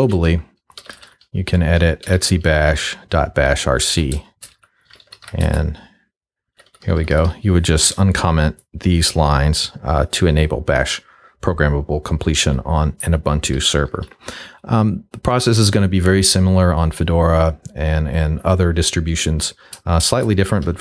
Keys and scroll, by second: 0.0-2.1 typing, 1.6 Tab, 2.2 Tab, 3.9 Return, 4.3-6.5 typing, 12.5 j, 13.6 k, 18.4-20.8 typing.